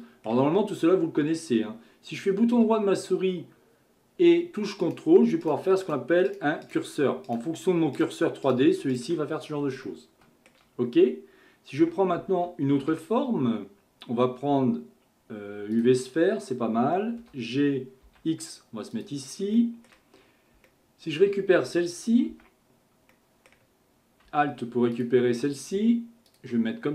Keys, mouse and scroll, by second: 4.8 ctrl+right click, 5.4 ctrl+right click, 5.9 ctrl+right click, 6.3 ctrl+right click, 7.3 ctrl+right click, 8.0 ctrl+right click, 8.4 ctrl+right click, 8.9 ctrl+right click, 9.5-9.9 scroll down 1, 9.9-11.8 shift+middle drag, 11.8 Tab, 12.8 shift+a, 17.2 g, 19.6-20.2 shift+middle drag, 20.2-20.7 scroll up 2, 20.7-22.3 shift+middle drag, 22.3 Tab, 23.1-24.9 middle drag, 24.9 alt+click, 26.3 click.